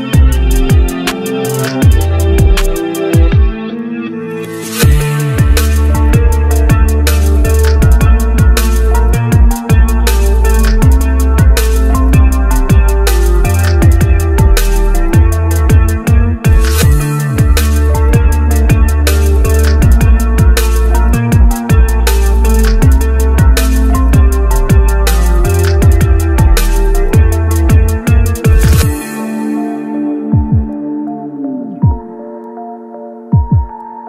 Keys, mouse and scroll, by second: 2.7 double click, 16.9-18.4 scroll down 1, 19.2-19.9 scroll down 1, 19.9-20.8 scroll up 1, 24.3 right click, 30.1-30.6 scroll down 1, 32.3-34.0 scroll up 1.